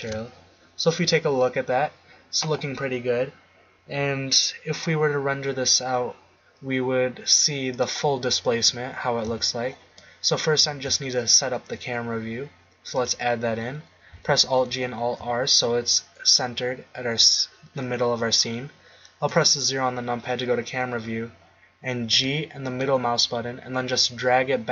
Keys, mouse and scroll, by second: 1.6-4.5 middle drag, 7.7 click, 8.7 click, 9.3 z, 10.7 shift+a, 14.4 alt+g, 14.7 alt+r, 19.3 KP_0, 22.1 g.